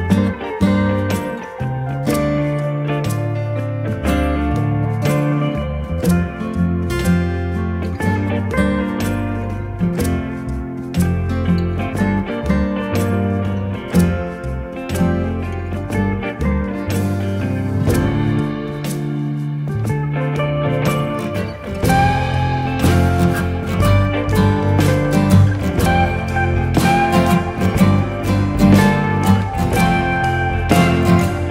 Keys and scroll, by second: 9.5 Escape, 10.4 d, 11.7 Escape, 13.4 d, 14.7 Escape, 15.7 d, 18.9 2, 19.7 Return, 22.1 Escape, 24.8 1, 25.1 5, 25.2 Return, 26.6 Escape, 26.7 d, 30.8 Return.